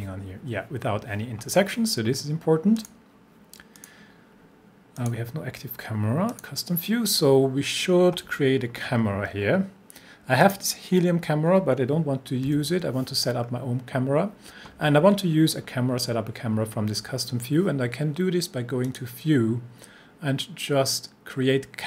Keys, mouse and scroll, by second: 2.8 click, 8.9-10.4 scroll up 1, 10.4 click, 13.4 scroll down 1, 18.8 click.